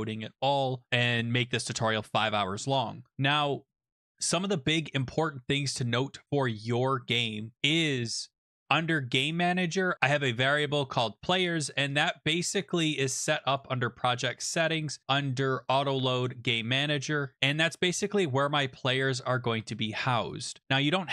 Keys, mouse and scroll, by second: 0.2-3.0 scroll, 3.0 scroll, 5.3-7.1 scroll, 7.1 click, 8.4 click, 8.5 click, 9.9 click, 12.1 click, 13.5 click, 14.7 click, 15.0 click, 15.7 click, 16.2 click, 17.3 click, 18.2 click, 20.2 click.